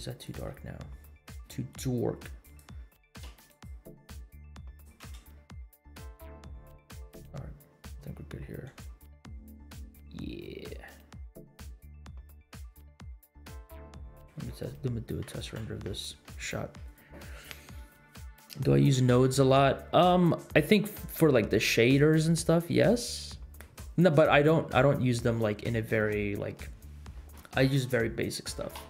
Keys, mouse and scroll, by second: 0.2 click, 2.4 click, 3.0 click, 3.5 click, 4.7-5.0 drag, 5.2 space, 7.9 space, 8.8 space, 12.2 space, 13.0 space, 13.3 space, 16.0 ctrl+s.